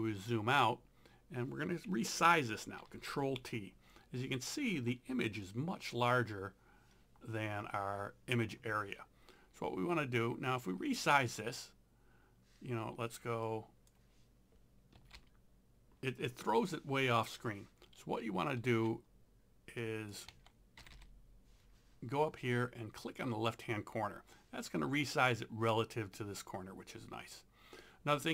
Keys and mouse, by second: 2.8 ctrl+t, 13.5 click, 14.7-15.7 typing, 18.7 Escape, 19.9 click, 20.3 1, 20.8 0, 23.0 click.